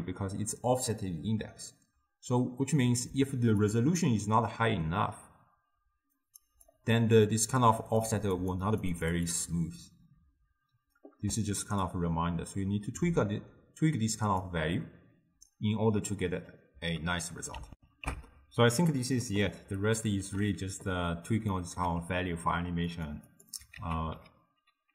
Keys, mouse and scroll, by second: 1.0-3.7 middle drag, 3.7-6.7 drag, 7.9-15.0 drag, 17.8 ctrl+alt+shift+w, 19.9-21.2 ctrl+middle drag, 21.2 click, 21.9 g, 23.4 click, 23.8 ctrl+a.